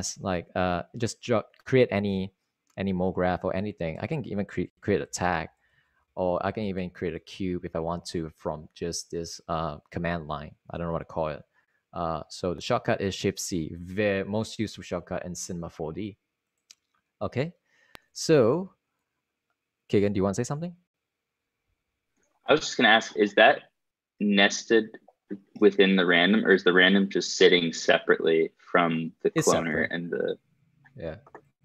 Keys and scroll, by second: 4.4-8.5 typing, 12.9 Return.